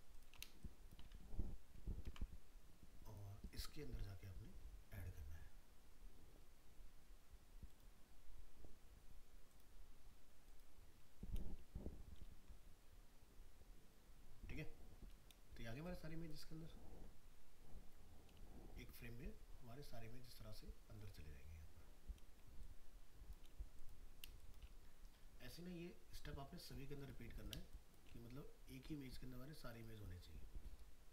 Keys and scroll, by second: 2.0 ctrl+x, 12.1 ctrl+v.